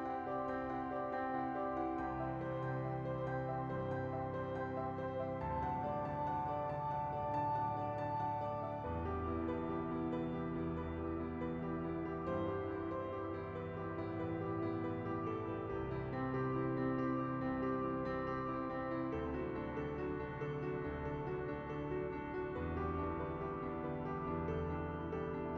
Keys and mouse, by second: 1.7-2.9 typing, 2.3 KP_Enter, 4.3 KP_0, 4.7 click, 5.1 click, 5.7 middle click, 7.1 shift+middle click, 8.3 shift+middle click, 9.5 click, 10.6 click, 15.7-16.9 drag, 17.2 click, 18.4 shift+a, 22.1 click, 22.7 click, 23.1 click, 24.3 KP_0.